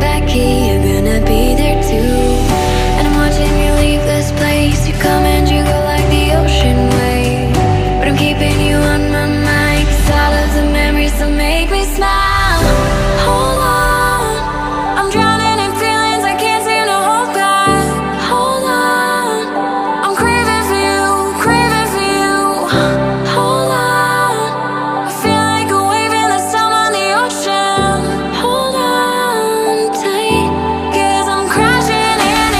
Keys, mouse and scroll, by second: 1.9 double click, 3.7 ctrl+d, 5.7 right click, 7.8 ctrl+click, 11.7 right click, 14.1 ctrl+d, 16.1 ctrl+d, 28.0 right click, 29.3 right click.